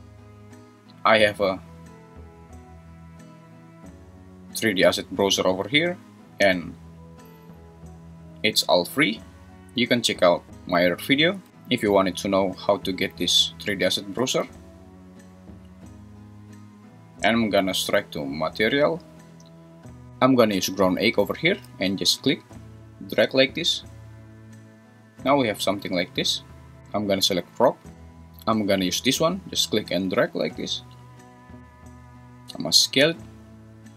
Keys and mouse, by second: 27.3 click, 29.1 click, 32.4 s.